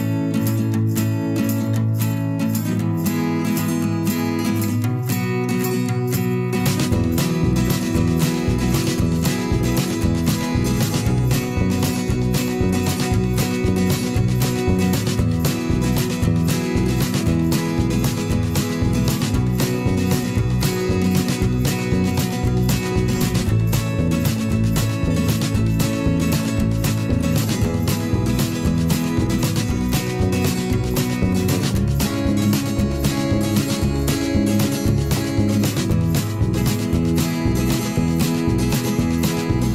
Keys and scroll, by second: 1.0 ctrl+z, 2.5 v, 3.5 ctrl+shift+[, 5.4 b, 7.0 ctrl+z, 7.6 ctrl+z, 8.8 ctrl+z, 10.9 v, 11.6 ctrl+shift+[, 12.1 shift+Left, 12.5 shift+Down, 12.6 shift+Right, 13.9 shift+Left, 15.2 Up, 15.8 shift+Down, 18.3 b, 20.5 ctrl+z, 21.7 ctrl+z, 23.1 ctrl+z, 24.8 v, 25.5 ctrl+shift+[, 25.8 shift+Left, 26.4 Right, 26.5 Up, 26.7 Right, 26.8 Up, 27.0 Right, 30.1 b, 31.0 v, 31.7 ctrl+shift+], 31.9 ctrl+shift+[, 32.3 shift+Up, 32.7 Down, 33.9 b, 36.3 ctrl+z, 37.7 ctrl+z, 39.1 v.